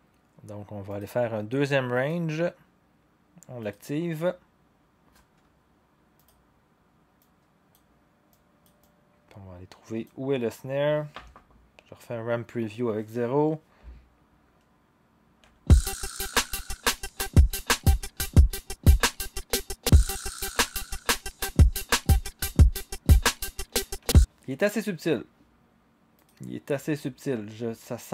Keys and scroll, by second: 11.1 0, 15.4 0, 24.0 0.